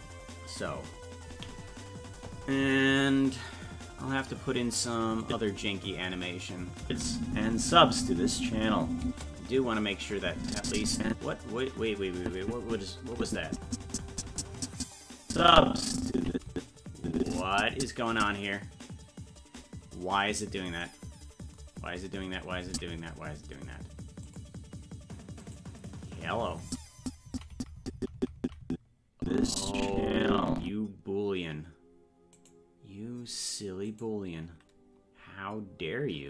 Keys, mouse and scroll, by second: 5.3 click, 6.8 space, 10.2-11.6 drag, 12.2-16.5 Right, 16.5-17.3 Left, 18.1 Right, 21.8-22.2 scroll up 2, 22.7 Left, 22.7 scroll up 2, 24.3 click, 25.9 right click, 26.7 Right, 27.0-32.8 Right, 32.8 right click.